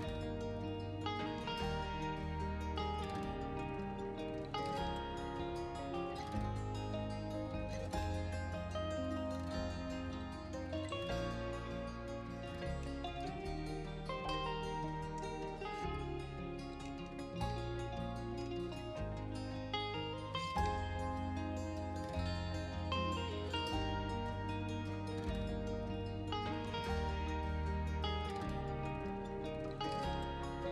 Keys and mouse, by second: 1.2 click, 1.5 click, 1.7 r, 1.8 z, 2.0 click, 2.3 r, 2.5 z, 2.9 click, 3.0-3.9 middle drag, 4.0 KP_1, 4.1 KP_3, 4.4 KP_1, 4.8 middle drag, 6.1 shift+d, 6.3 shift+z, 7.0 click, 7.1 middle click, 7.8 click, 8.0 r, 8.2 z, 8.8 click, 8.9 g, 9.2 shift+z, 9.5 click, 9.9 middle click, 10.4 middle click, 10.7 middle click, 10.9 r, 11.0 z, 11.7 middle click, 11.9 r, 12.0 z, 12.8 click, 12.9-13.3 middle drag, 13.4 KP_1, 13.8 middle click, 14.0 middle drag, 14.4 r, 14.7 z, 14.8-15.2 middle drag, 15.3 middle click, 16.2 shift+d, 16.3 shift+z, 17.1 z, 17.8 middle click, 18.6 shift+d, 18.9 shift+z, 19.3 r, 19.6 z, 20.3 middle click, 21.2 s, 22.4 middle click, 22.9 KP_1, 23.1 middle click, 23.8 z, 25.0-25.4 middle drag, 25.5 middle click, 25.9 middle click, 26.6 shift+d, 26.8 shift+z, 27.1 click, 27.3 z, 27.9-28.6 middle drag, 28.6-29.2 middle drag, 29.8 shift+d, 29.9 shift+z.